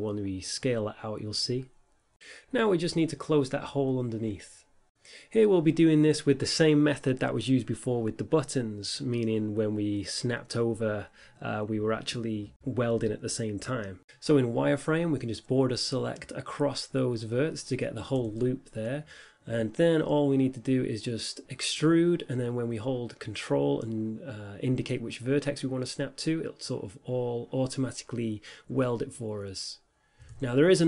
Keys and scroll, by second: 0.4 s, 1.8 Tab, 5.0 Tab, 5.6 s, 7.4 Tab, 12.9 Tab, 14.6 a, 14.8 1, 15.8 5, 16.8 z, 18.6 b, 20.0 z, 21.6 5, 24.6 e.